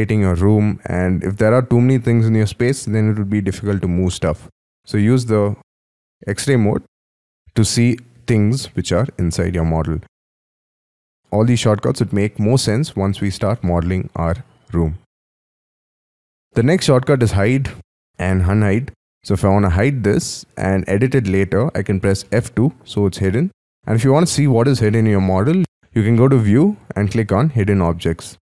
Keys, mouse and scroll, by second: 5.8 y, 6.1 y, 7.1 y, 7.2-9.5 scroll up 11, 9.5 scroll down 5, 14.7 Escape, 15.3-16.1 scroll up 4, 16.1-16.5 scroll down 4, 16.5 middle click, 17.4 scroll down 4, 17.8 y, 18.0 scroll up 4, 18.2 middle click, 20.8-22.1 scroll down 3, 22.3 F2, 28.3-28.5 scroll up 7.